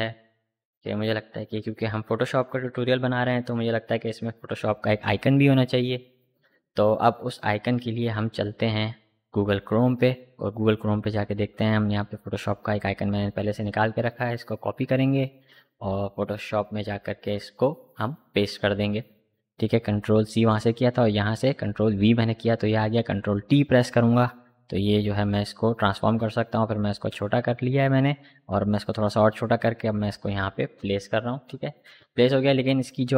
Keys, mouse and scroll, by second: 10.7 click, 12.9 right click, 14.1 click, 19.6 ctrl+v, 21.3 ctrl+t, 23.1-33.1 drag.